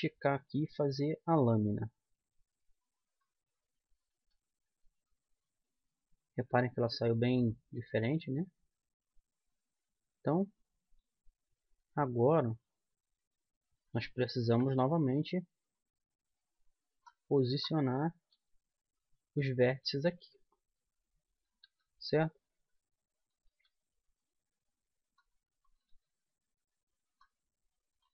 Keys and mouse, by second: 5.2 z, 6.9 z, 8.7-11.8 middle drag, 13.0-14.0 drag, 14.0 middle click, 14.9 KP_1, 17.8 middle click, 18.5-19.7 middle drag, 18.7 g, 21.7-25.4 drag, 22.1 g, 23.9 g, 26.0-28.1 drag, 26.3 g.